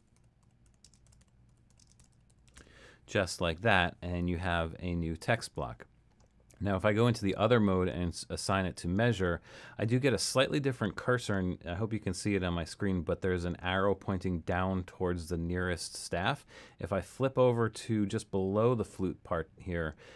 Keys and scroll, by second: 0.0-3.1 typing.